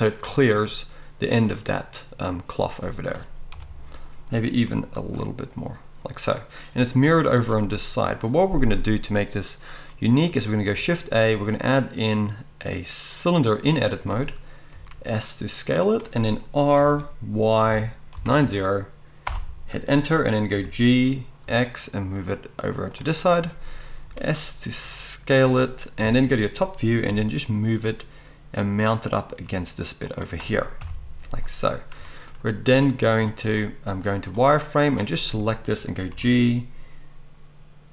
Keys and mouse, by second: 3.5 KP_7, 4.6 g, 7.1 z, 10.7 shift+a, 14.7 s, 16.8 r, 21.1 g, 24.0 s, 26.0 KP_7, 27.1 g, 30.8 KP_1, 33.1 z, 34.3-37.9 drag, 36.1 g.